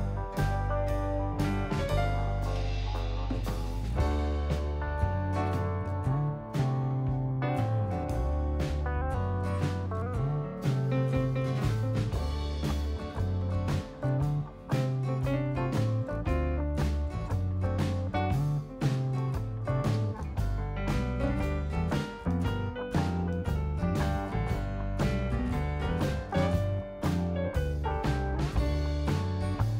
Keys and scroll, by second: 14.9 Left, 23.8 Left.